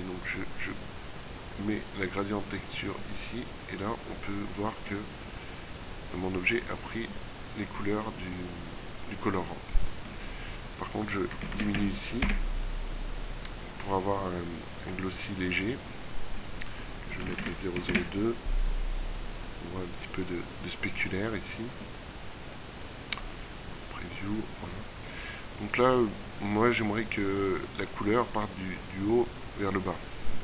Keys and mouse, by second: 4.9-11.3 middle drag, 14.8-16.4 middle drag, 23.2-25.3 drag.